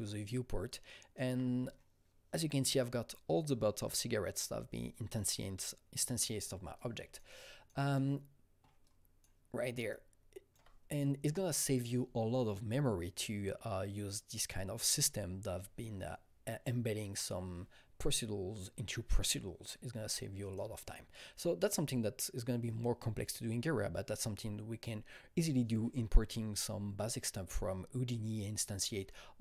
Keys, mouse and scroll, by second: 6.6 alt+Num_Lock, 6.6 alt+right click, 6.6 alt+middle click, 6.7 alt+double right click, 7.0-20.4 alt+middle drag, 8.8-29.4 alt+right drag, 9.9-29.4 alt+drag.